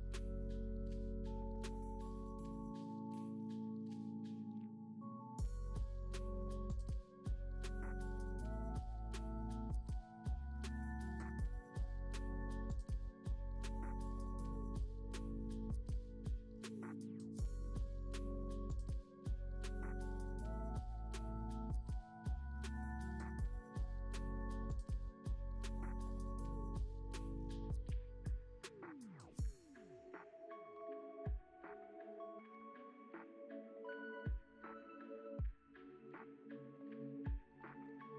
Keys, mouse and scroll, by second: 1.1-1.8 scroll up 5, 1.8-2.8 drag, 2.8 g, 3.6-4.2 middle drag, 4.2-4.9 drag, 4.9-5.3 scroll down 8, 5.3-6.9 middle drag, 8.0-8.4 scroll up 1, 8.4 shift+a, 12.3-13.8 drag, 13.9-15.5 middle drag, 15.5 scroll up 3, 16.2-19.3 drag, 25.4-26.6 middle drag, 26.6-29.7 drag, 30.0-31.5 middle drag, 33.6-34.4 scroll up 3, 34.4-36.6 drag, 36.6 ctrl+z, 37.4-38.1 scroll down 9.